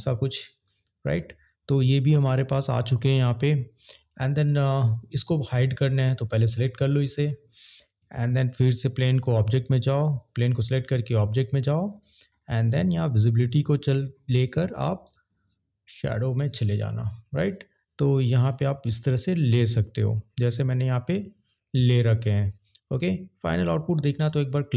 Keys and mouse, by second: 5.7 click, 9.1 click, 13.5 click, 15.1 click, 24.5 click.